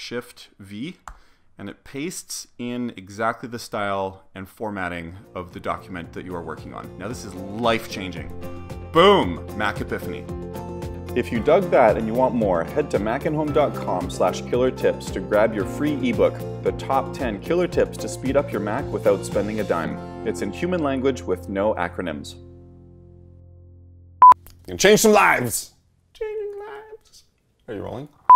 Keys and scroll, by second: 1.0 alt+shift+super+v.